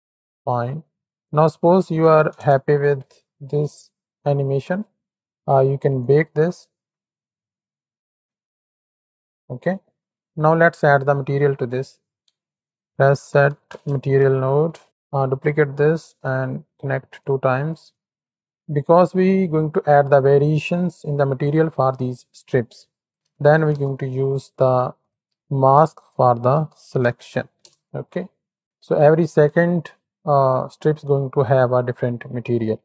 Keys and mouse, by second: 0.6 space, 1.6 click, 4.5 space, 5.9-8.0 drag, 8.9-10.2 drag, 11.0 shift+click, 11.1 shift+middle click, 11.2 shift+click, 12.2 shift+a, 14.8 click, 15.1 shift+d, 16.5 shift+d, 17.5 drag, 18.0 click, 22.9-25.1 drag, 25.8-27.6 drag, 28.5 middle click.